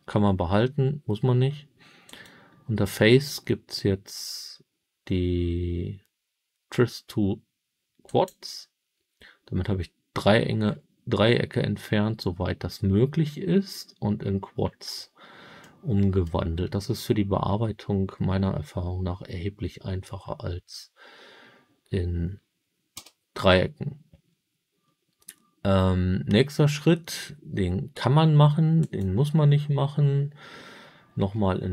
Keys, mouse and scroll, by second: 2.0-8.2 drag, 10.5-11.2 scroll up 11, 11.7 scroll down 2, 13.0-14.1 scroll down 5, 14.7-15.5 scroll down 3, 15.5 middle click, 16.5-17.8 scroll up 1, 22.9 Tab, 28.7-30.8 drag, 31.2 Tab.